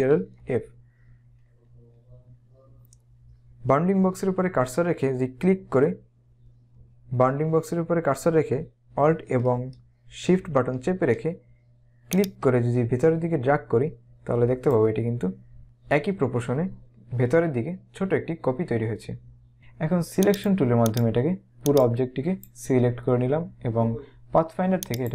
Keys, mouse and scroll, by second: 0.3 ctrl+f, 12.1 alt+shift+click, 20.4 click, 24.9 click.